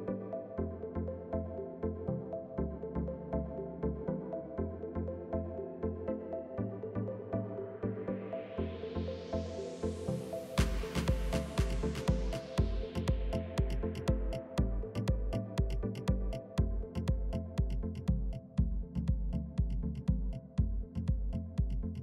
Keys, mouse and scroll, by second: 0.3 scroll up 3, 0.5-1.0 scroll down 1, 1.0 click, 1.6 click, 3.5 s, 5.3 click, 5.7 s, 7.3 click, 7.5 s, 9.7 click, 10.0 s, 11.8 click, 12.1 s, 14.3 click, 14.7 s, 17.2 middle click, 17.9-18.5 scroll down 1, 18.5 drag, 18.7-20.3 middle drag, 20.3 KP_3, 20.9-21.5 scroll up 1, 21.5 click, 21.7 shift+middle click.